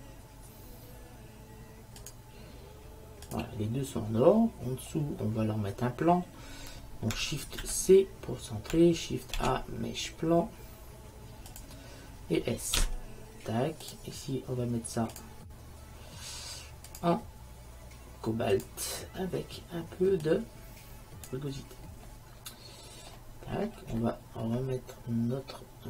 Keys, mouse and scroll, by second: 2.1-4.0 drag, 4.3-6.2 middle drag, 7.7 shift+c, 9.5 shift+a, 12.9 s, 15.2-18.6 drag, 20.3-22.1 drag, 23.3-23.8 middle drag, 23.8 drag, 23.8 right drag, 24.0-25.4 middle drag, 25.5 middle click.